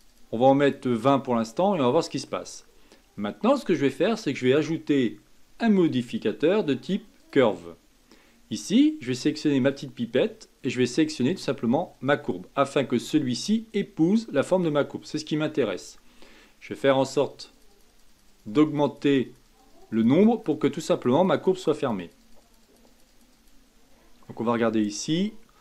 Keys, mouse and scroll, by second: 1.3 scroll down 3, 1.7-4.4 middle drag, 4.4-7.6 drag, 9.7 click, 17.0-24.3 drag, 24.3 middle click, 25.1-25.6 scroll up 4.